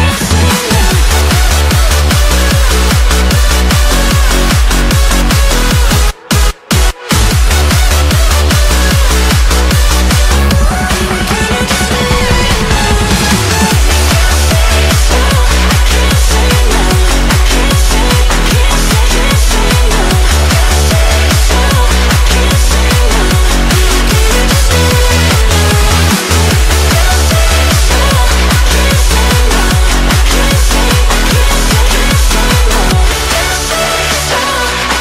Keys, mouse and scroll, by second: 0.4 alt+click, 1.1 g, 4.4 Tab, 4.7-5.1 scroll down 3, 5.1 shift+middle click, 5.4 scroll up 1, 5.7 g, 6.9-7.9 middle drag, 7.9 KP_1, 8.6-9.0 scroll up 2, 9.0-9.4 shift+middle drag, 9.4 scroll down 2, 11.7 Tab, 12.9 g, 14.4 Tab, 14.8 shift+middle click, 15.3 Tab, 16.1 r, 17.4 Tab, 18.2 shift+a, 19.8-20.3 scroll down 1, 20.3 s, 22.2-22.5 scroll down 1, 22.5 shift+middle click, 22.8 s, 25.8 g, 27.4 Tab, 29.1 shift+middle click, 29.8 e, 33.9 shift+middle click, 34.4 g.